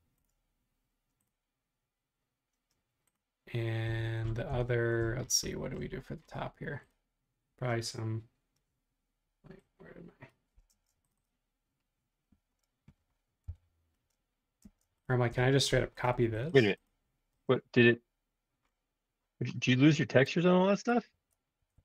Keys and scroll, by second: 0.3 |, 3.8 Escape, 10.7 space, 13.4 l, 14.6 space, 15.0 i, 21.1 Home, 21.6 Home, 21.7 Home.